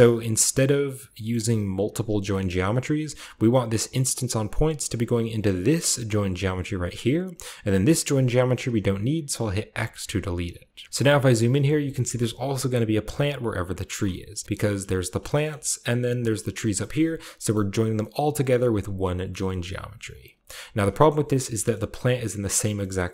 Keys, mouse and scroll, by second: 1.2 middle click, 2.3-3.0 middle drag, 3.0-9.6 drag, 9.6 x, 10.8-13.5 scroll up 4, 11.4 shift+middle click, 11.9-13.5 shift+middle drag, 13.5 click, 14.6 g, 14.9 click, 15.1-16.1 scroll down 1, 15.3-16.8 drag, 16.8 a, 18.3-18.8 drag, 18.8-21.0 scroll down 1, 18.8 typing, 20.0 click, 20.3 typing, 21.0-22.6 shift+scroll up 1, 21.6-22.6 shift+middle drag, 22.8-23.1 middle drag.